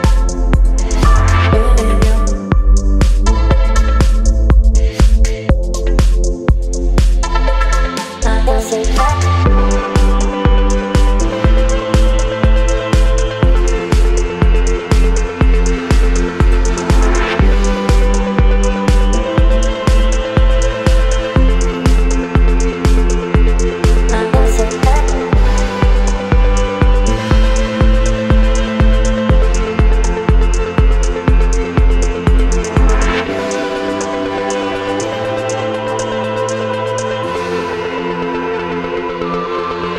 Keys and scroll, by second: 0.1 Return, 1.5 space, 2.8 ctrl+t, 5.8 Return, 7.4 space, 8.9 ctrl+t, 12.5 Return, 23.0 KP_3, 23.3 KP_8, 23.3 Return, 27.3 Delete, 28.8 v, 31.1 ctrl+t, 35.1 Return, 35.4 space, 36.4 p.